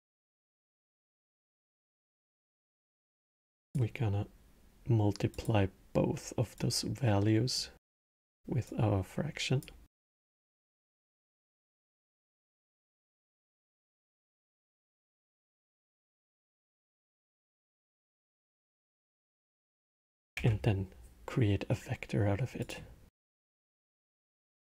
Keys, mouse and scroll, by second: 0.6-1.3 middle drag, 1.3 click, 1.7 click, 2.5 shift+d, 5.0-6.5 drag, 8.4-8.7 drag, 9.6 drag, 10.3 shift+d, 13.5 drag, 15.6 drag, 18.3-19.4 drag, 19.4-20.1 middle drag, 20.1 shift+a, 23.5 click.